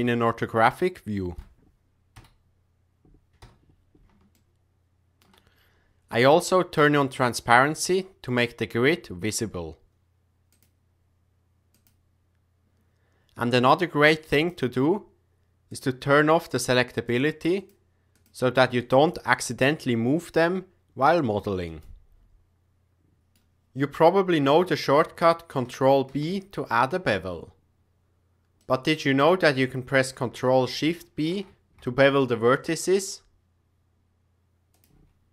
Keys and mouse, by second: 0.2-1.3 ctrl+middle drag, 2.1 KP_3, 3.4 KP_7, 4.3-5.2 shift+middle drag, 10.5 click, 11.7 click, 14.3-15.9 drag, 17.0 click, 17.5 click, 18.1 click, 18.7 click, 19.7 g, 21.7-22.2 right drag, 23.2 middle click, 25.0 Tab, 26.1 ctrl+b, 31.1 ctrl+shift+b.